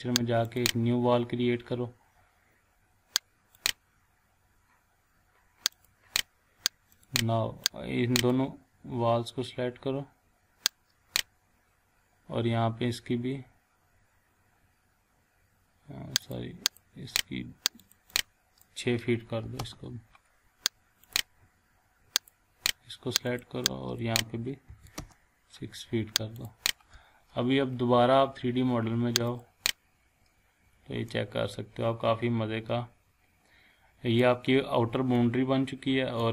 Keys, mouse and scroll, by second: 3.5-8.6 drag, 10.7-11.3 drag, 14.6-16.2 scroll up 1, 16.2-18.7 drag, 19.4 6, 19.6 Return, 21.0 click, 24.7 6, 25.0 Return, 26.4 click, 29.3 click, 31.1-34.2 shift+middle drag, 34.2-34.8 shift+scroll up 2, 35.2-36.3 shift+middle click.